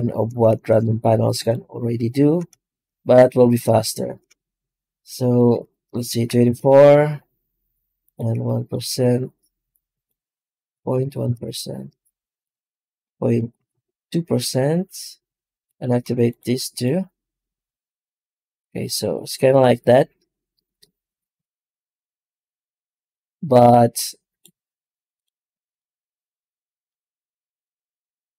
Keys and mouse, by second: 0.4 shift+q.